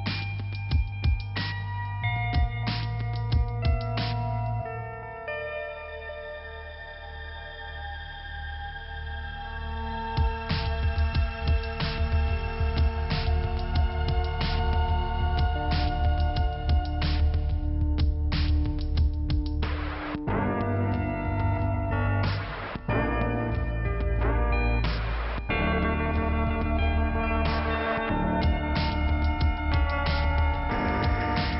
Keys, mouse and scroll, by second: 0.5 click, 3.0 click, 3.1 click, 4.0 click, 4.0 click, 4.1 click, 4.2 click, 7.3 click, 9.1 click, 12.3 click, 12.4 click, 12.9 click, 13.0 click, 14.5 click, 17.5 click, 19.3 click, 20.9 click, 24.0 click, 25.8 click, 25.9 click, 27.4-28.2 scroll up 1, 28.2 click, 28.3 click, 28.3 click, 28.4 click, 29.3 click, 30.8 click.